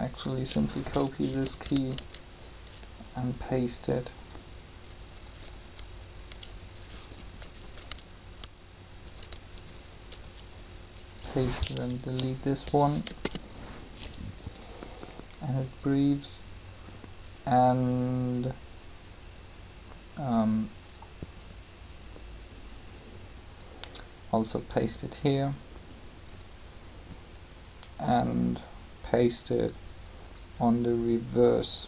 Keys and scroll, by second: 1.3 Up, 7.1 Up, 12.9 Delete, 13.0 Return.